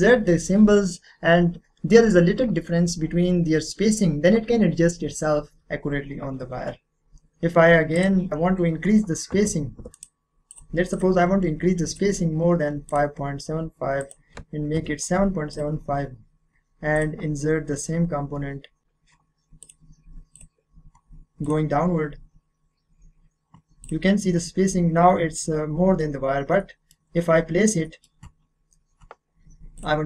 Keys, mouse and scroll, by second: 7.9 click, 9.9 right click, 10.5 click, 14.8 7, 15.5 click, 19.6 click, 23.8 click, 26.6 middle click, 27.0-27.8 scroll down 1, 27.8 middle click, 27.9 middle click, 29.7 click.